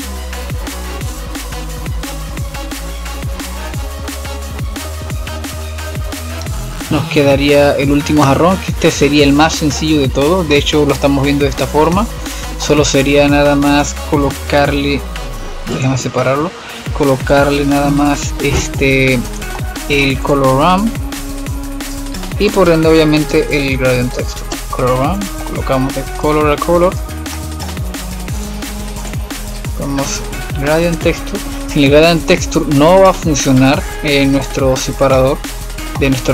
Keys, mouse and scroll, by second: 2.5-4.8 drag, 4.8-6.3 middle drag, 6.3 shift+q, 6.5-8.2 middle drag, 8.2 click, 9.8-11.7 middle drag, 11.7-12.0 scroll up 5, 12.0-13.2 middle drag, 13.2 click, 13.9 click, 15.2 shift+q, 17.1 click, 18.3 x, 19.1-20.3 middle drag, 20.3 click, 21.3 x, 22.0 shift+a, 26.2-27.5 drag, 27.5-28.3 middle drag, 28.3 click, 28.6 shift+a, 33.0-35.0 drag, 35.0-36.3 middle drag.